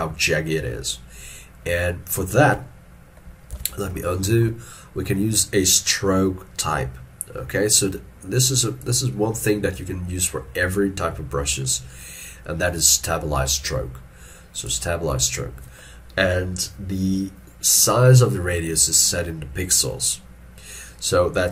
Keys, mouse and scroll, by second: 3.6 ctrl+z, 4.2 shift+middle click.